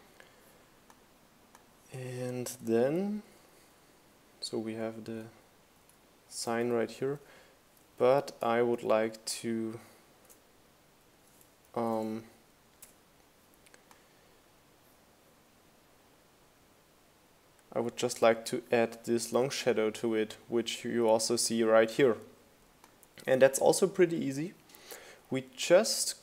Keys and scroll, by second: 0.8 Right, 1.2 Down, 1.5 Up, 2.2 Right, 2.7 Up, 2.9 Right, 3.2 Down, 3.6 Up, 3.8 Right, 4.8 super+j, 6.2 super+c, 6.3 super+v, 6.8 shift+Up, 7.0 shift+Left, 7.7 shift+Up, 8.2 shift+Right, 9.8 super+z, 11.0 BackSpace, 25.8 r.